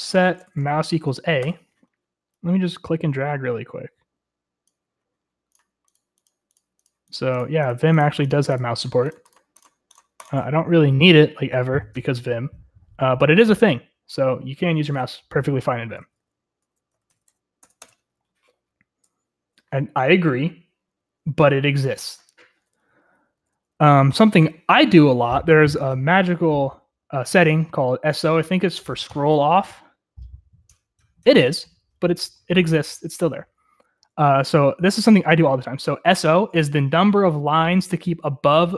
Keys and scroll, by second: 0.1-2.0 typing, 4.3 Return, 4.3 typing, 18.3 shift+l, 24.3 0.